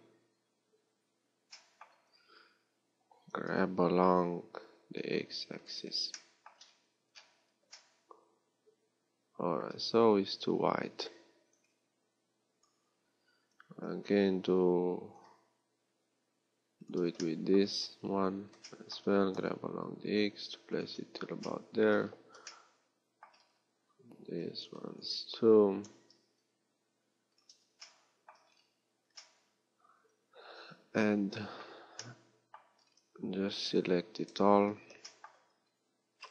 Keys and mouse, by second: 3.5-6.9 middle drag, 3.5 g, 10.3 a, 13.7 g, 24.3 a, 33.2 a, 33.4 a, 34.3 KP_7.